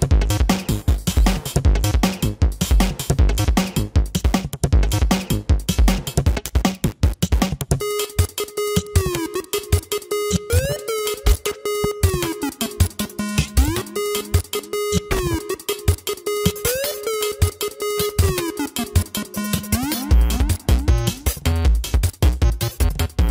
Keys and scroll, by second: 0.8 space, 2.7 space, 4.0 space, 4.4 ctrl+alt+z, 7.4 space, 12.8 space, 15.8 space, 18.4 space, 19.5 space, 21.2 space, 22.9 space.